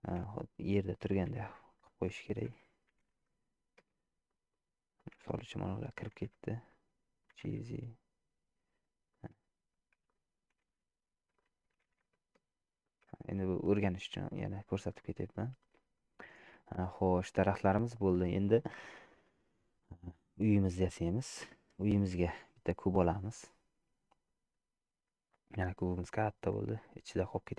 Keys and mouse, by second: 1.1 g, 3.0 g, 4.4 middle click, 5.0 click, 6.2 g, 7.4 g, 10.1 click, 10.8 g, 11.9 g, 14.6 shift+middle click, 15.0-16.2 middle drag, 16.8 shift+middle click, 20.7 shift+middle click, 21.1 middle click, 22.2 shift+a, 26.9 middle click.